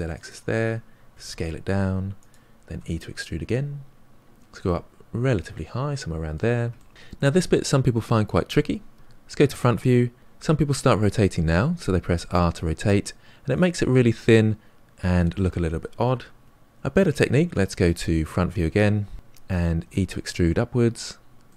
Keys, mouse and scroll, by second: 1.0 s, 2.6 e, 4.2-4.6 scroll down 1, 4.6-6.9 middle drag, 6.9 scroll up 2, 7.1-8.9 middle drag, 8.9 KP_1, 11.0 r, 13.8-16.5 middle drag, 16.5 ctrl+z, 18.2 KP_1, 19.8 e, 21.4-21.5 middle drag.